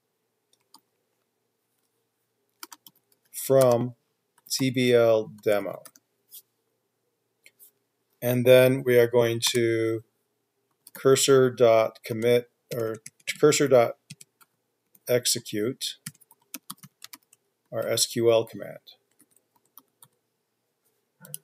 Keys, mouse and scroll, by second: 1.1-1.4 typing, 3.4-4.4 typing, 5.6-6.3 typing, 9.7 Return, 10.9-20.9 typing, 12.4 Tab.